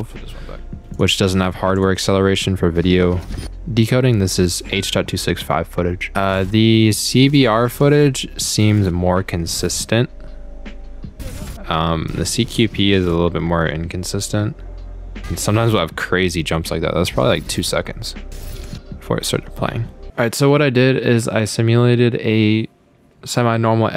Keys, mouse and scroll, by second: 1.0 click, 1.8 click, 3.3 click, 5.1 click, 6.4 click, 7.0 click, 8.0 click, 8.8 click, 9.7 click, 11.4 click, 13.1 click, 15.7 click, 17.6 click, 18.7 click.